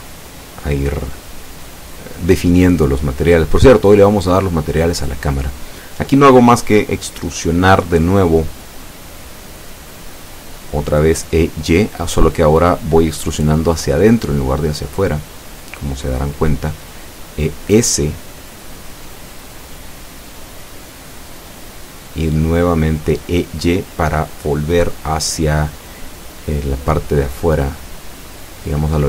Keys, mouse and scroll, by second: 2.5 click, 5.6-6.9 middle drag, 7.4 e, 7.7 s, 13.3 click, 16.1 e, 16.4 y, 22.8 click, 26.3 e, 26.7 s.